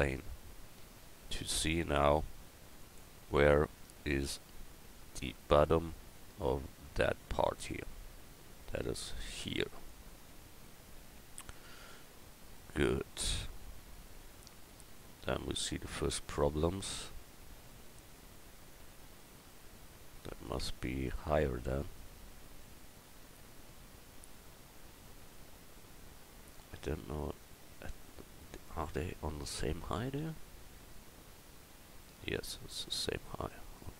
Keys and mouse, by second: 1.6 s, 20.3-21.8 right drag, 21.8-24.9 middle drag, 29.4 KP_1.